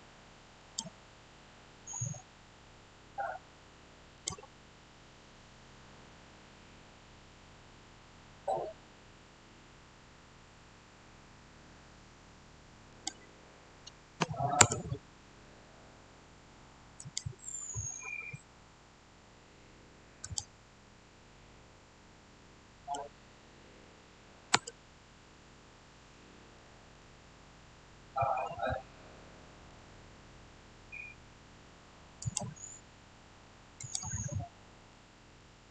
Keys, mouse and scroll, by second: 1.9-3.6 scroll down 1, 4.0 click, 12.8 click, 14.5 Return, 16.9 click, 20.1 click, 20.1 click, 22.3-24.5 middle drag, 24.5 Return, 26.9-32.1 shift+middle drag, 32.1 click, 35.1 shift+scroll down 1, 35.2-35.7 shift+middle drag.